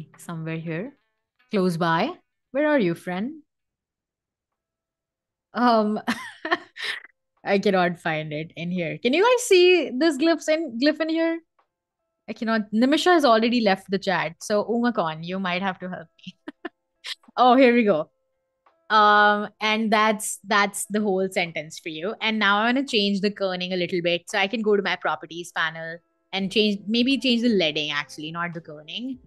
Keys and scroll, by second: 21.2 Escape.